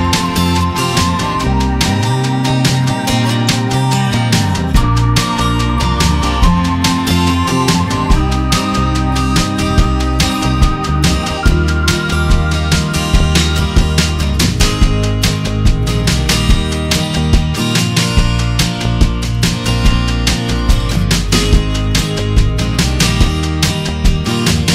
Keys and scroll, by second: 1.8 k, 4.5 Return, 8.1 ctrl+z, 9.2 ctrl+alt+z, 14.4 ctrl+d, 16.9 ctrl+t, 17.7 F7.